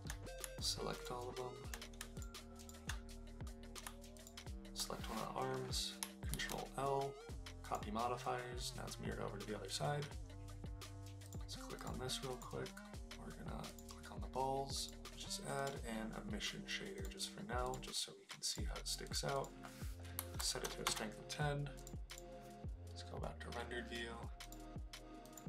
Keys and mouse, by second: 1.0 shift+click, 2.6 shift+click, 4.1 shift+click, 6.3 ctrl+l, 11.2 click, 11.8 click, 12.3 click, 14.9 click, 15.6-17.1 drag, 19.0 click, 19.3-21.1 drag, 21.8 click, 22.6 click, 24.5 click, 25.2 click.